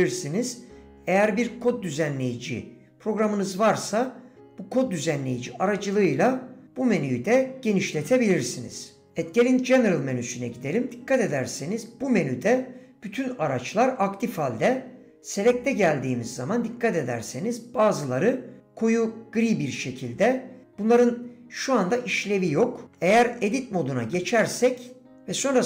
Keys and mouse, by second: 24.6 Tab.